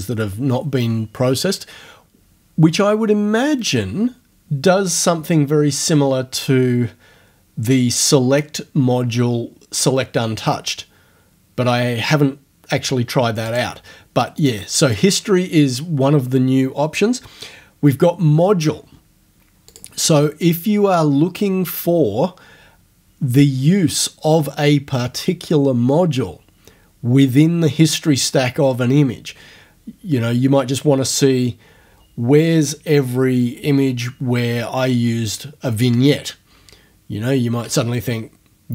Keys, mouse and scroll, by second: 13.5 click, 14.5 click, 14.9 click, 19.7 click.